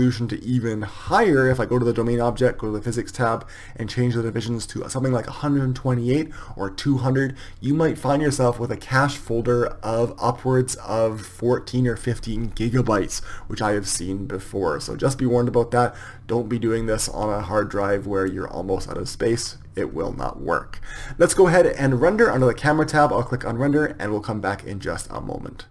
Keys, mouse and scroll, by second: 3.2-24.9 drag.